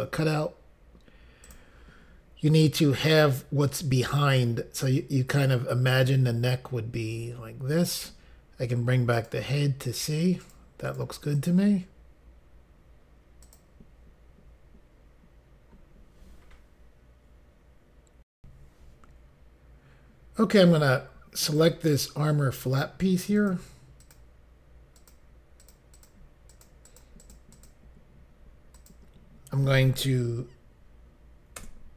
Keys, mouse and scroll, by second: 1.4 click, 2.4 click, 9.1 click, 9.8 click, 10.4 click, 10.8 click, 11.0 double click, 11.3 click, 11.5 double click, 13.4 click, 18.3 Insert, 21.5 click, 23.3 click, 24.0 click, 24.9 click, 25.6 click, 25.9 click, 26.5 click, 26.8 click, 27.2 click, 27.3 double click, 27.5 click, 28.7 double click, 28.9 click, 31.6 Return.